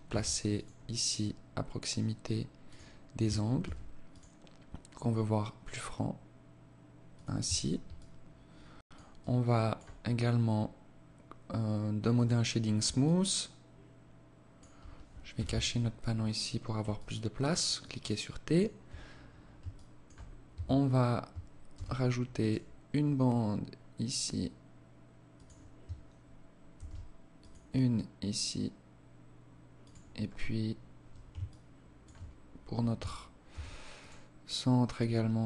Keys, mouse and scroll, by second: 1.5 ctrl+r, 3.0 ctrl+r, 6.8 Tab, 7.3 alt+click, 8.5 alt+click, 9.3-9.9 scroll up 1, 9.9 scroll down 1, 10.2 scroll down 1, 11.5 click, 12.3 alt+click, 14.7 t, 15.3-16.2 scroll down 2, 16.2 scroll down 1, 16.3 alt+click, 17.1 alt+click, 18.5 scroll up 1, 19.0 alt+shift+click, 19.6-19.9 scroll up 2, 19.8 Tab, 21.0 ctrl+r, 26.1 ctrl+r, 29.7-30.0 scroll up 3, 30.7 alt+shift+click, 31.7 scroll up 1, 32.9 ctrl+r.